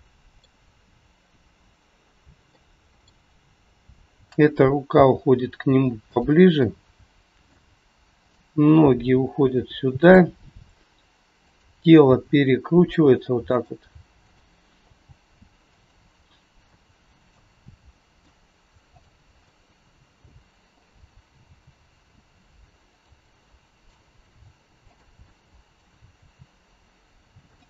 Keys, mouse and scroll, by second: 2.4 middle click, 3.8 click, 4.8 g, 6.6 middle click, 8.2 click, 8.8 g, 11.3 click, 12.0 g, 14.2 click, 14.8 g, 16.6 middle click, 17.9 middle click, 18.8 click, 19.3 scroll up 1, 19.4 middle click, 20.7 click, 21.4 g, 23.2 middle click, 24.8 click, 25.2 middle click, 26.2 g.